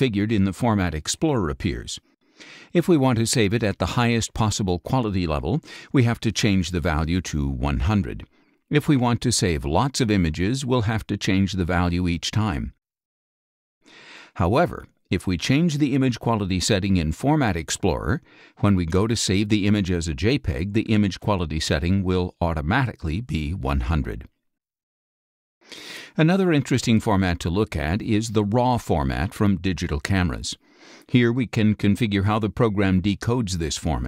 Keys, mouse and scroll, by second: 1.3 click, 2.2 click, 7.7 KP_1, 8.2 KP_0, 11.4-11.8 scroll up 2, 14.9 middle click, 15.0 scroll up 2, 16.5 middle click, 16.9 KP_1, 17.3 KP_0, 18.3 middle click, 18.3 scroll up 2, 18.9 click, 19.8 ctrl+shift+s, 21.3 click, 22.0 click, 23.3 click, 24.1 click, 28.4 click.